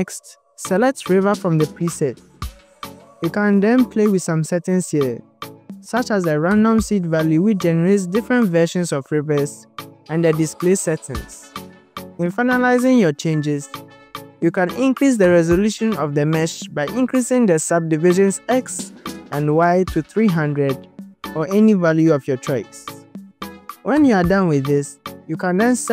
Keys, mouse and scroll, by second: 1.7 click, 2.2-3.1 scroll up 3, 3.1 click, 3.1-4.0 scroll up 1, 6.2 click, 7.7 click, 8.1 click, 9.0 click, 10.2 click, 10.7 click, 11.1 click, 15.7-17.1 drag, 18.2-21.8 drag, 19.0 KP_0, 22.3 click, 22.9 KP_0, 25.1-25.8 scroll down 6.